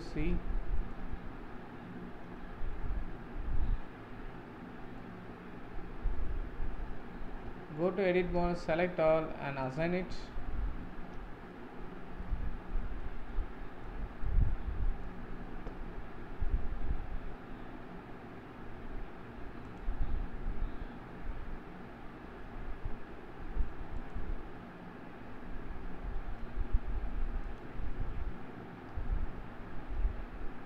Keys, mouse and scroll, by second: 0.7-6.8 shift+middle drag, 7.5 Tab, 8.4 a, 9.6-10.7 drag, 10.7 Tab, 11.5-17.4 middle drag, 19.6 click, 26.3 Tab, 27.1 Tab, 27.4 click, 27.9-28.7 scroll down 5, 28.7-29.1 scroll up 1, 29.1 z, 30.3-30.6 scroll up 4.